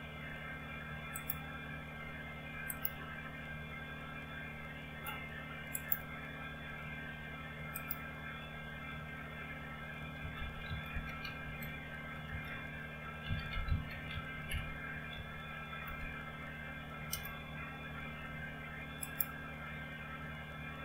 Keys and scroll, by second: 10.3-15.2 typing, 16.2 Return, 17.1 Return.